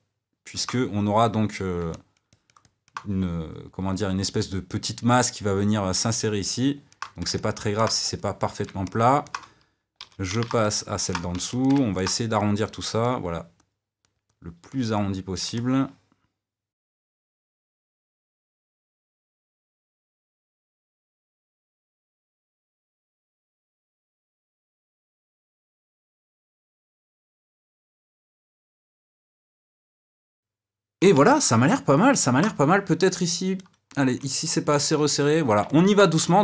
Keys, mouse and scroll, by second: 8.1 click, 8.8-10.2 middle drag, 10.2 d, 10.6 middle click, 11.3 f, 11.7 middle click, 12.4-15.5 drag, 15.5-17.0 middle drag, 17.0 click, 17.2 middle click, 17.4 f, 17.6 click, 18.1 d, 18.3 click, 18.5 middle click, 18.7 f, 18.8-20.3 middle drag, 19.2 click, 20.3 f, 20.5 middle click, 20.5 f, 20.7 f, 20.9 click, 21.3 f, 21.4 middle click, 21.6 click, 22.0 middle click, 22.4 d, 22.5 middle click, 22.6 f, 22.8-24.0 middle drag, 24.0 f, 24.1 middle click, 24.6 click, 24.7 middle click, 25.0 click, 25.2 middle click, 25.3 click, 25.5 middle click, 25.7 click, 26.0-27.1 middle drag, 27.1 f, 27.3 click, 27.6 middle click, 27.9 click, 28.2 click, 28.5-35.1 ctrl+middle drag, 35.1 d, 35.6 middle click, 36.3-36.4 drag.